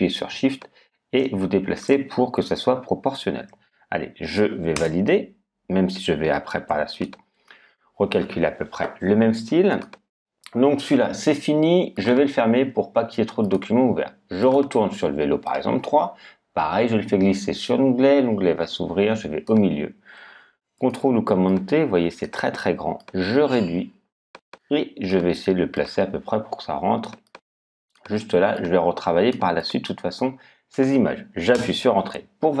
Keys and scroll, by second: 4.7 Return, 31.5 Return.